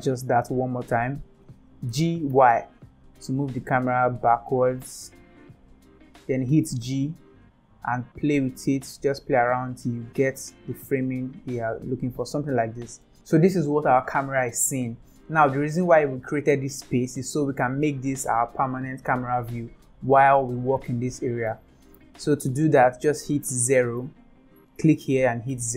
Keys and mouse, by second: 1.8 g, 6.6 g, 9.1 g, 12.4 g, 12.8 g, 20.1 middle click, 24.1 click, 24.5 click, 25.5 KP_0.